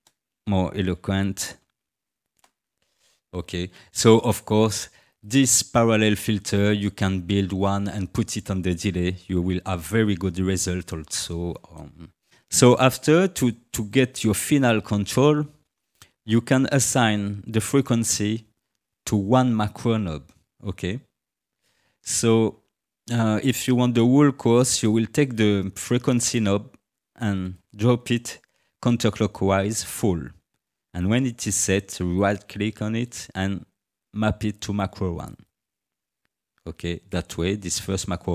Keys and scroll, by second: 0.0-2.0 typing, 2.3 Return.